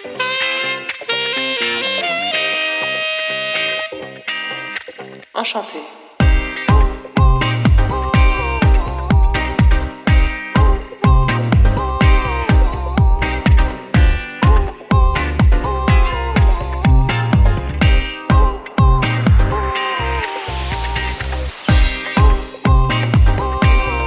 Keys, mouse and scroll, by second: 0.6 right click, 1.8 scroll up 2, 2.0 scroll down 1, 2.7 scroll down 1, 3.0 click, 7.7-9.4 scroll up 5, 8.2 middle click, 9.5 click, 11.0 click, 15.8 BackSpace, 21.4-22.0 scroll up 1, 22.0 click.